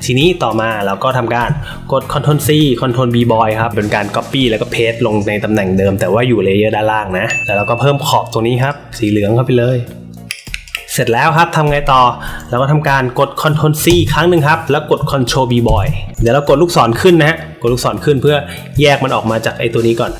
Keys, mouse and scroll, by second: 0.4 click, 2.2 ctrl+c, 3.5 ctrl+b, 8.6 click, 10.2 click, 10.4 click, 10.6 click, 13.8 ctrl+c, 15.6 ctrl+b.